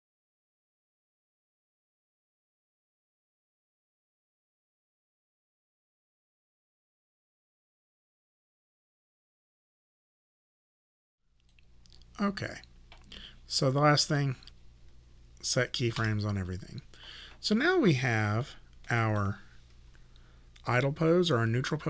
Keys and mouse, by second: 0.1 click, 1.0-2.5 typing, 2.8 click, 3.9 click, 4.3 click, 4.9 Return, 5.5 click, 6.0 e, 6.2 click, 6.7 click, 7.0 w, 7.2 click, 7.9 click, 8.2 e, 8.3 click, 9.6 click, 9.9 w, 10.1 click, 10.7 click, 10.9 e, 11.0 click, 14.1 click, 16.0 s, 18.5 click.